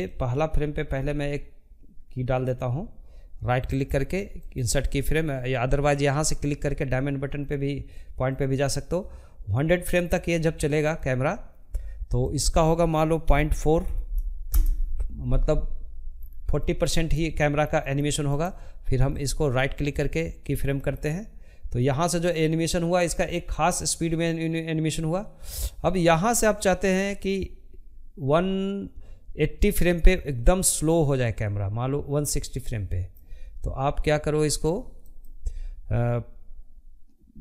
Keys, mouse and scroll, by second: 2.6-6.3 right drag, 6.3-14.2 drag, 14.2-14.7 scroll down 1, 14.7 shift+middle click, 15.2 scroll up 1, 15.4-18.0 shift+middle drag, 18.0 right click, 18.8-19.9 shift+middle drag, 19.9-22.9 drag.